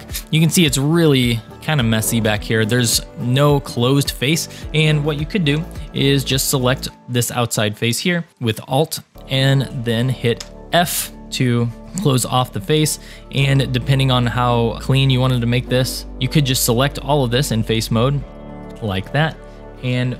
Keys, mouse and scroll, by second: 2.5 shift+middle click, 3.2 middle click, 3.9-4.3 scroll down 2, 4.4 shift+middle click, 5.6 2, 6.4 alt+click, 7.0-8.1 middle drag, 10.4 f, 11.2 click, 11.3-12.4 middle drag, 12.8 scroll down 1, 13.2 shift+middle click, 13.8 middle click, 14.7 click, 15.3 click, 15.7 click, 16.1 3, 16.5 click, 18.2 middle click, 19.4-20.1 scroll down 5.